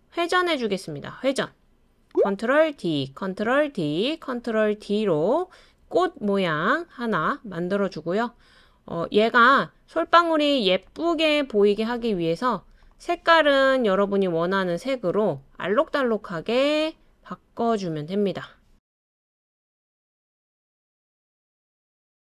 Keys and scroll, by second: 2.8 super+d, 3.5 super+d, 4.2 super+d.